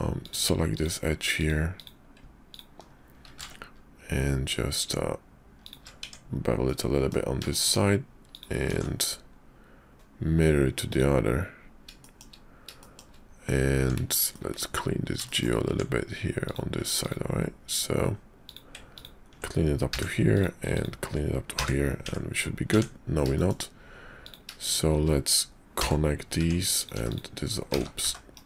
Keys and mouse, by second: 0.2 click, 0.7 click, 1.3 click, 1.7 click, 2.5 ctrl+click, 3.2 ctrl+b, 6.0 Tab, 6.6 click, 7.5 shift+click, 8.3 click, 8.6 alt+x, 10.9 click, 12.0 shift+click, 12.8 shift+middle click, 13.8 Tab, 14.3 click, 15.2 shift+click, 15.6 Tab, 16.4 click, 17.0 ctrl+click, 18.4 click, 18.9 ctrl+click, 19.9 f, 20.3 click, 20.7 ctrl+click, 21.5 f, 22.0 Tab, 22.7 Tab, 23.3 shift+click, 24.2 click, 24.6 shift+click, 25.8 j, 26.4 Tab, 26.7 click, 26.9 x, 27.6 z.